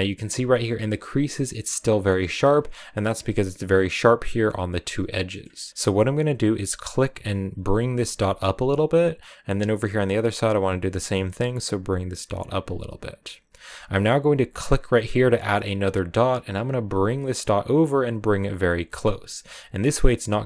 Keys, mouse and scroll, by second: 8.8-9.8 drag, 10.9-14.3 drag, 14.9-20.3 drag.